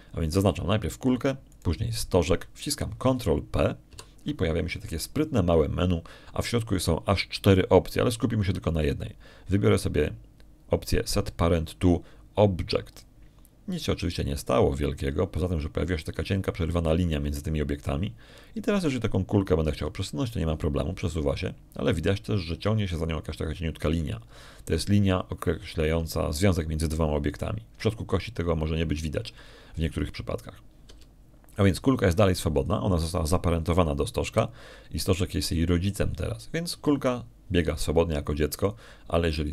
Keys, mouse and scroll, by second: 0.5 right click, 3.4 shift+right click, 5.7 ctrl+p, 14.8 click, 17.6 middle click, 20.6 right click, 21.6 g, 26.5 click, 32.7 g, 34.4 click, 38.5 g.